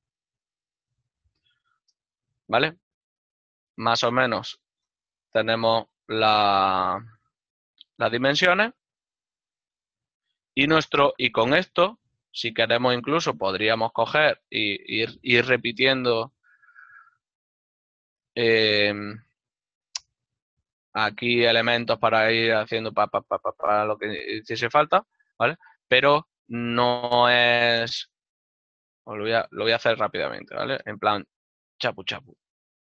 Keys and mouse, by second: 6.9 KP_0, 7.6 click, 8.2 shift+middle click, 16.6 click, 16.7 alt+right click, 17.7 shift+d, 19.3 x, 20.9 click, 23.1 click.